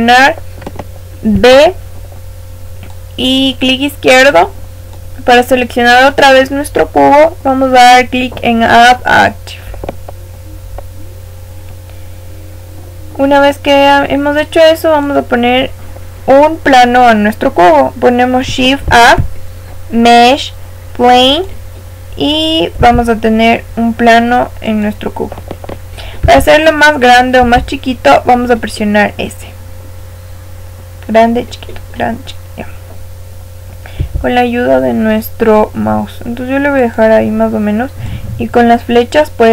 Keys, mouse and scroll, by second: 1.2 b, 9.2 click, 13.2-15.0 middle drag, 15.0 click, 22.7 s, 26.2 s, 27.4 s, 38.0 click.